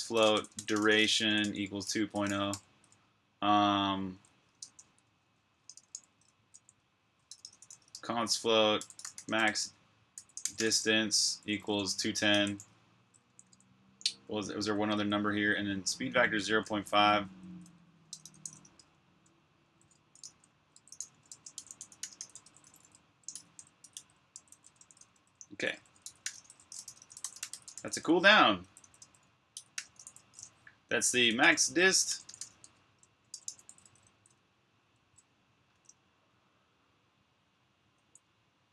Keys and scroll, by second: 0.0-0.6 typing, 3.2 typing, 4.2-8.8 typing, 9.9-11.4 typing, 13.9-14.6 typing, 16.3-23.2 typing, 25.1 typing, 30.8-35.5 typing, 38.4-38.7 typing.